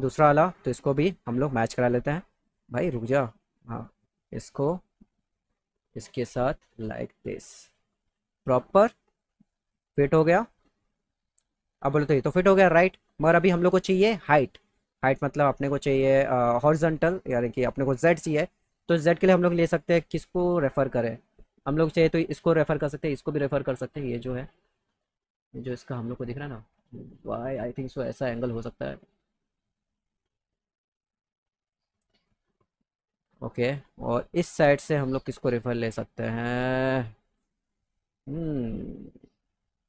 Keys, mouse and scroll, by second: 1.5 click, 2.9-4.6 drag, 5.5-6.6 drag, 8.0 click, 9.5-11.0 drag, 18.4-21.8 drag, 24.5 click, 26.5-27.5 drag, 28.3 click, 28.7 right click, 29.6 scroll up 1, 30.4 right click, 31.8 click, 33.5 click.